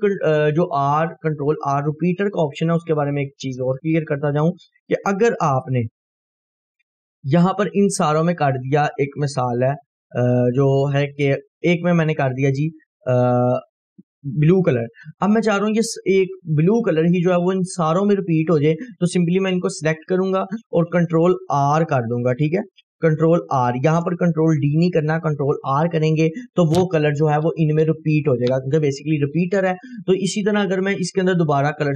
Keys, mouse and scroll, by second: 0.4 scroll down 1, 1.1-1.7 click, 1.8 scroll down 1, 2.5-4.0 drag, 5.7 right click, 6.6 click, 7.0 Delete, 7.2 scroll up 1, 7.7-8.3 drag, 11.7 click, 15.2 scroll up 1, 16.2 scroll down 1, 17.5-18.8 drag, 23.7 ctrl+r.